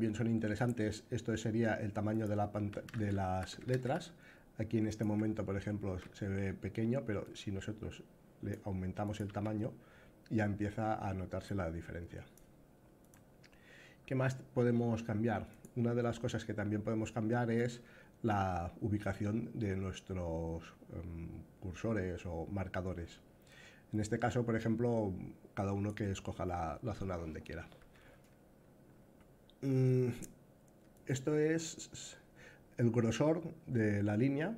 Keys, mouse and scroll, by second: 2.5 a, 3.2 s, 6.9-8.2 drag, 8.8-12.8 drag, 11.2 a, 17.3-25.6 drag, 30.7-33.0 drag, 33.7-34.5 drag.